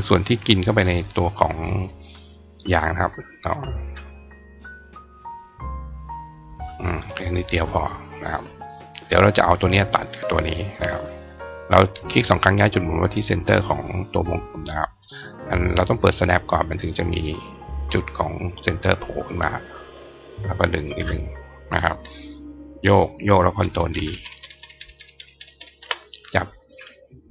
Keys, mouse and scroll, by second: 2.2 click, 3.2 click, 4.7 click, 5.6 click, 8.5 click, 10.3 click, 11.4 click, 12.2-14.9 drag, 15.6 click, 16.5 click, 17.6-18.6 drag, 19.8-20.9 ctrl+drag, 20.7 ctrl+right click, 26.1-26.5 drag.